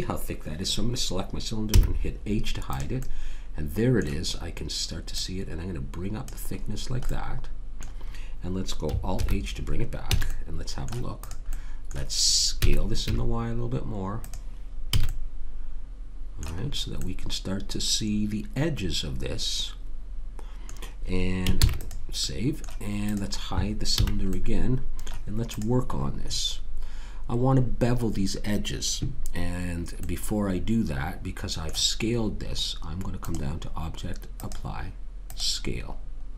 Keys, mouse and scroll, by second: 1.7 h, 2.7 click, 4.5 middle click, 5.2 click, 6.7-9.2 middle drag, 9.2 alt+h, 10.1 a, 10.3 middle click, 11.2 click, 12.6 s, 14.9 a, 15.1-17.1 middle drag, 21.6 ctrl+s, 23.1 click, 24.0 h, 25.5 click, 30.0-32.2 middle drag.